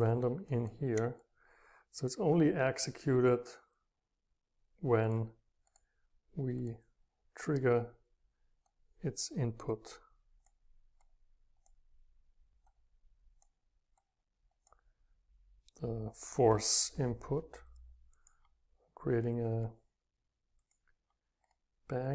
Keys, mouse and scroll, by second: 0.0 space, 0.6-1.2 middle drag, 1.2-4.6 drag, 4.7 scroll down 1, 8.6-11.1 drag, 11.1-11.4 scroll up 4, 11.2 click, 11.4-12.6 drag, 14.4-16.4 drag, 16.6-18.2 drag, 19.3-20.6 right drag, 20.6-21.4 middle drag, 21.4-22.1 right drag.